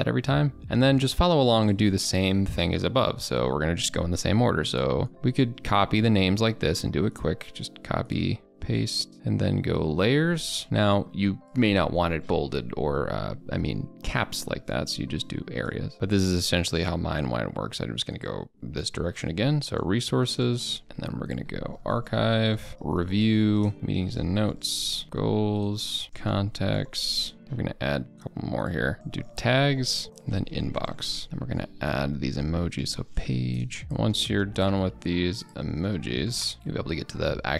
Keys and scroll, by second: 5.1 ctrl+a, 5.4 ctrl+c, 7.6 ctrl+v, 33.8 ctrl+BackSpace.